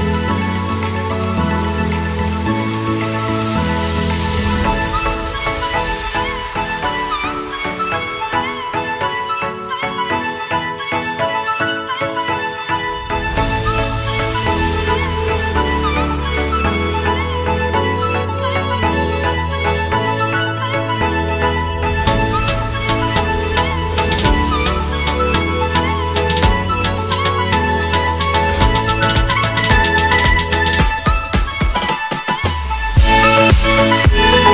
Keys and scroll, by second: 0.0 ctrl+Page_Up, 1.1 Escape, 5.0 p, 5.9 BackSpace, 6.1 Caps_Lock, 6.3 p, 10.1 space, 29.0 shift+F2, 29.4 Escape.